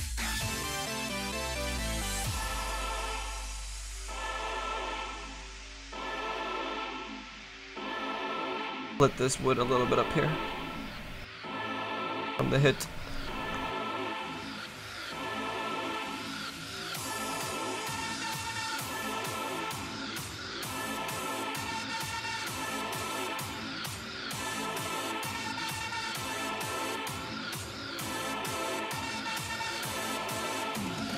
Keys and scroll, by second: 4.1 s.